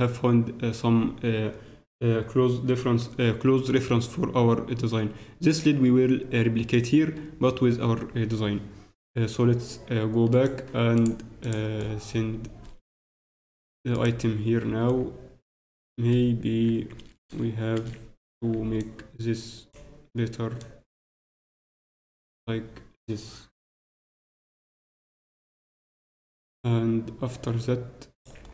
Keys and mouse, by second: 8.1-10.3 middle drag, 10.3-11.8 right drag, 11.8-13.3 middle drag, 13.7 alt+middle click, 13.9 alt+right click, 14.7 alt+Tab, 14.9-16.1 right drag, 16.1-18.5 typing, 28.4 middle click.